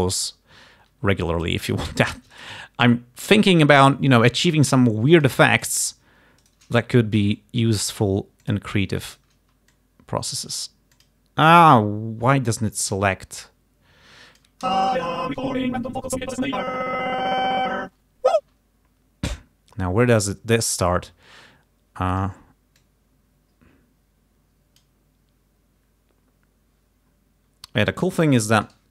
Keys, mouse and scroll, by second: 0.4-2.0 alt+drag, 2.4 shift+right click, 4.0-5.5 alt+drag, 5.6 alt+click, 6.5 shift+right click, 7.4 click, 8.5 click, 9.2 shift+right click, 9.8 alt+shift+click, 11.1 click, 11.6 click, 12.5-14.7 drag, 14.7 space, 18.5 space, 22.2 click, 22.8-25.0 drag.